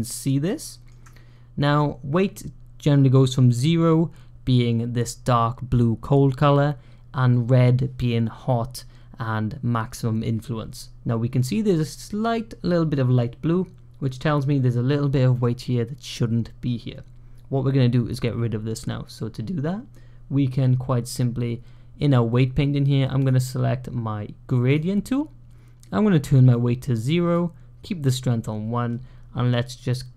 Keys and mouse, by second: 23.0 click, 24.5-27.2 drag, 29.7-30.1 drag.